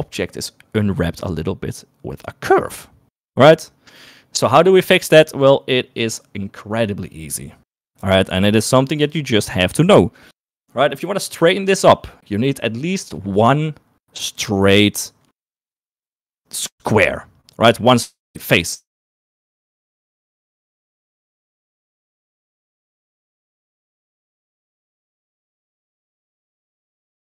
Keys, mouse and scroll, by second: 9.3 shift+middle click, 15.7 3.